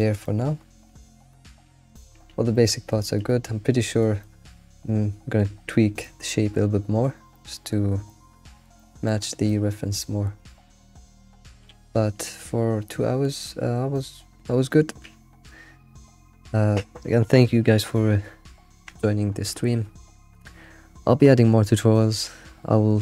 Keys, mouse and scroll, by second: 2.0 alt+q, 2.5-4.8 middle drag, 5.0 middle click, 5.0 alt+o, 6.2-8.6 middle drag, 8.4 alt+q, 8.6 alt+shift+z, 8.7 middle click, 9.2 scroll down 1, 9.4-10.7 middle drag, 10.7-11.0 scroll up 3, 10.9 alt+shift+z, 11.7 alt+shift+z.